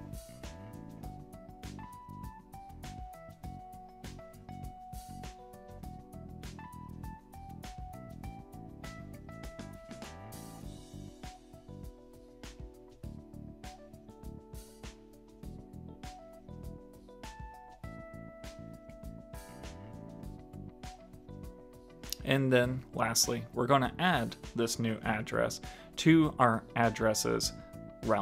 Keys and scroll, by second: 9.1 shift+super+Left, 18.1 super+s.